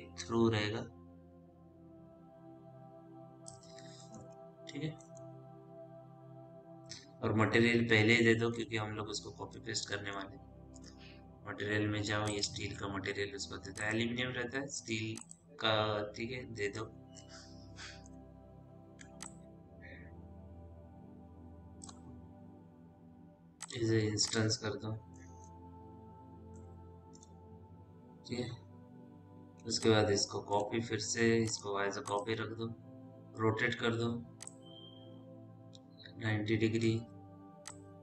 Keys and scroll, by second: 4.8 f, 5.2 p, 10.6 m, 25.5 f, 32.2 e, 37.3 w.